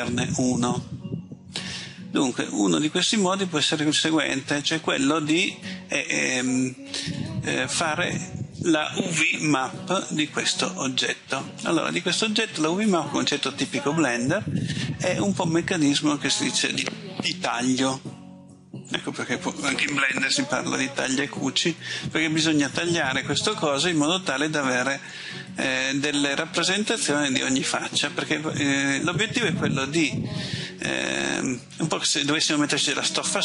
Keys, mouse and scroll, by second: 2.1 a, 3.8 middle click.